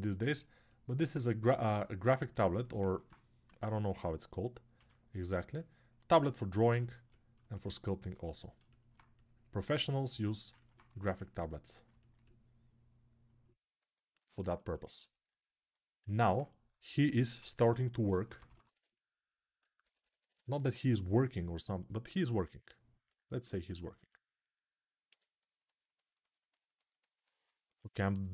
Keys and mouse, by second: 1.7-6.4 ctrl+alt+drag, 3.2 2, 7.8-14.2 alt+shift+drag, 10.6 1, 16.0 alt+q, 17.2-18.4 [, 24.8 s.